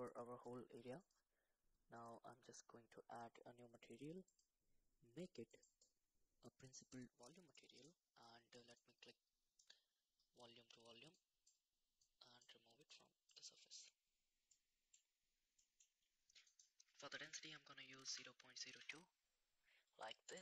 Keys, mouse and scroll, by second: 1.0 click, 2.0 click, 4.2 click, 5.5-7.0 drag, 8.7-10.4 drag, 11.1 click, 11.9 click, 12.8 click, 14.5-15.5 middle drag, 16.6-18.9 drag.